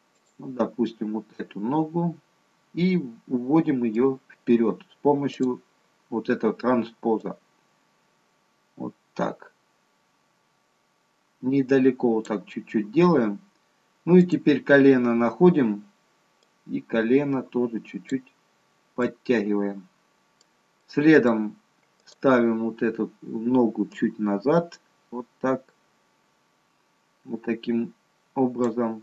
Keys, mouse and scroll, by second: 0.1 click, 1.3 middle click, 5.3 click, 7.6 click, 13.0-13.7 scroll up 3, 14.1 click, 16.3 click, 18.5-19.4 scroll down 2, 18.9 middle click, 20.7 middle click, 22.0 click.